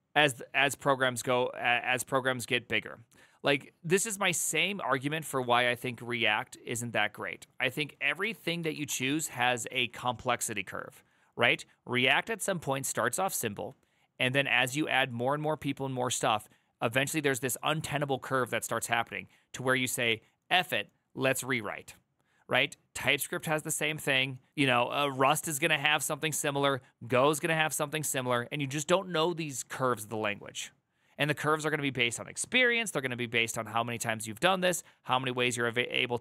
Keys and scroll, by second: 8.0 alt+=, 8.4 ctrl+n, 8.6 Return.